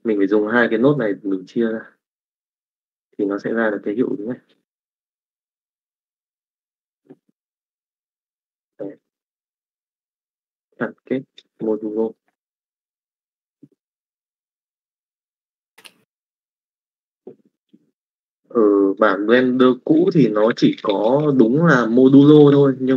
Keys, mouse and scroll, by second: 0.7 middle click, 1.7 click, 2.5 click, 11.9 middle click, 13.0-14.0 drag, 14.2 click, 17.5 middle click, 18.4 click, 19.6 middle click, 20.3 click, 20.9 shift+a.